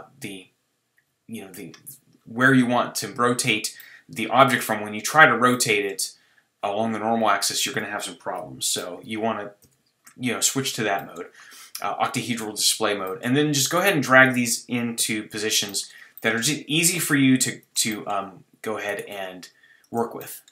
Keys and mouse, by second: 3.8 click, 8.6 ctrl+z, 9.6 KP_1, 11.0-13.5 middle drag, 14.2 middle click, 15.0 KP_3, 15.0 middle click, 16.7 g, 19.1 g.